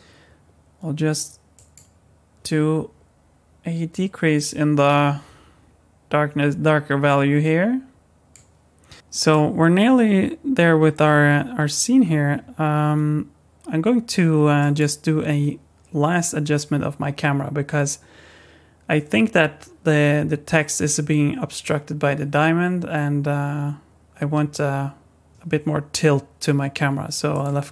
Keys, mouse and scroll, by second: 1.5 click, 8.9 Tab, 9.2 click, 10.7 KP_1, 12.0-12.4 scroll up 4, 14.6 click, 27.3 click.